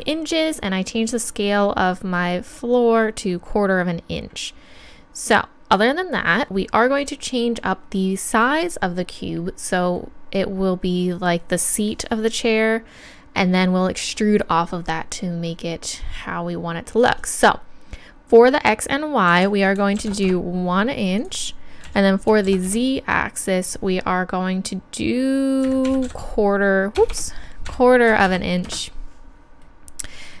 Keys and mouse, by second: 17.0-18.9 drag, 21.2-22.9 drag, 23.6-25.5 drag, 27.1 BackSpace.